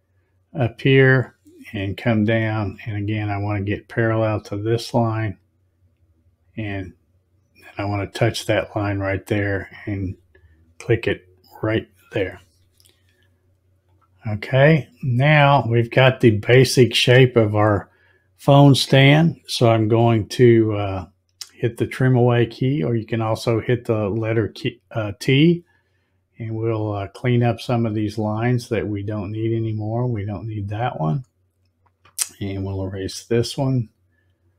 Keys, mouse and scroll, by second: 1.0 click, 9.4 click, 13.8 click, 24.5 click, 29.9 click, 32.9 click.